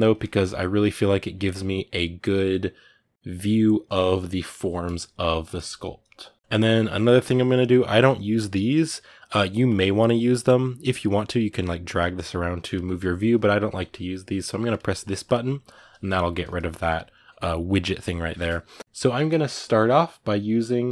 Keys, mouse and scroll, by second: 0.0-9.5 ctrl+middle drag, 9.5-20.9 drag.